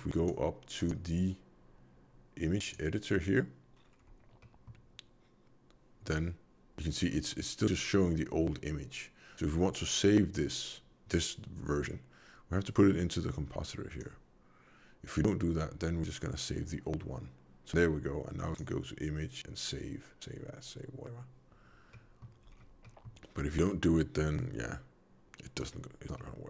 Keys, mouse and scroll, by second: 2.7 click, 3.7-4.3 scroll down 4, 4.3 middle click, 7.1 scroll up 3, 7.6 middle click, 12.6 click, 18.4 click, 21.2 click, 21.9 middle click, 22.4-22.8 scroll down 1, 22.8 middle click, 24.4 click, 26.1 middle click.